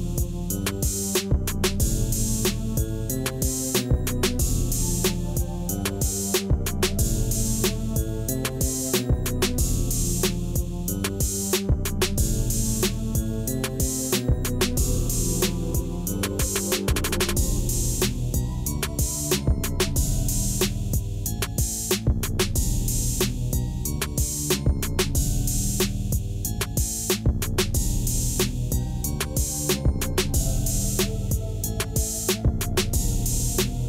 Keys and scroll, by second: 0.8 Tab, 3.5 shift+a, 6.4 Tab, 7.1 s, 8.7 s, 16.8 i, 21.3 e, 24.8 2, 32.8 7.